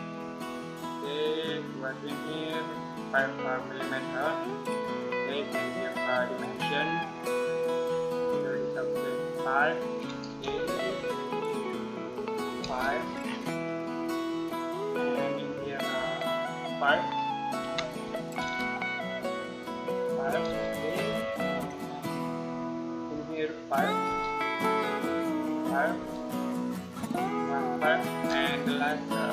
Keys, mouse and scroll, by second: 5.4 click, 7.3-8.3 scroll down 1, 8.3 click, 10.3 Return, 11.4 click, 12.5 Return, 12.7 scroll down 1, 12.8 scroll up 1, 13.0-13.4 scroll down 1, 13.4-14.1 scroll up 1, 14.1 middle click, 15.5 click, 17.4 5, 18.2 Return, 19.1 click, 20.3 Return, 20.6 scroll down 1, 20.8 scroll up 1, 21.2 middle click, 22.8 click, 23.9 Return, 24.6 click, 25.8 Return, 26.8 click, 28.0 Return, 28.5 click.